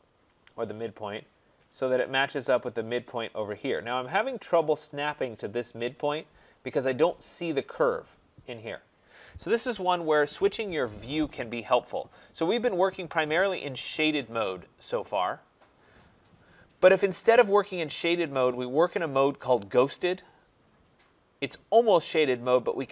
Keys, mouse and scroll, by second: 0.0 scroll, 0.2 scroll down 5, 0.2 typing, 2.0-3.8 scroll down 3, 4.0-4.3 scroll, 7.2 scroll up 1, 10.0 Escape, 11.8 click, 20.0 click.